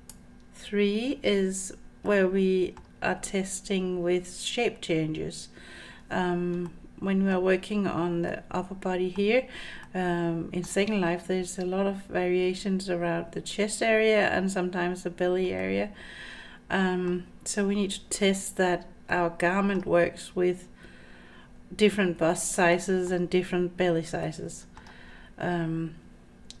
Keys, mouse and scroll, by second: 2.1 middle click, 6.7-7.3 middle drag, 8.3-9.2 middle drag, 9.2-9.6 scroll down 1, 9.6 scroll up 2, 9.9-10.7 middle drag, 15.6-17.1 middle drag, 19.1-19.8 middle drag, 22.7-23.1 middle drag, 24.2-24.8 middle drag.